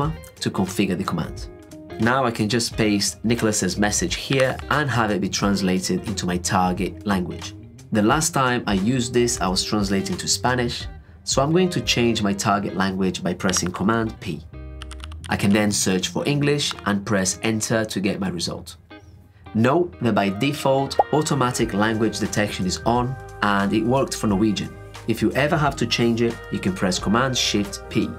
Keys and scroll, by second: 13.6 super+p, 27.3 shift+super+p.